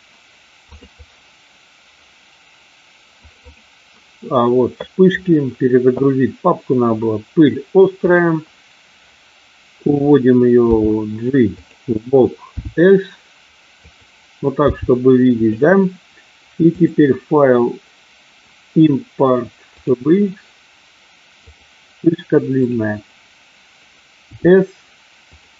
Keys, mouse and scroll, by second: 10.6 g, 12.6 s, 13.8 click, 14.5 g, 16.8-19.9 drag, 24.2 s, 25.3 click.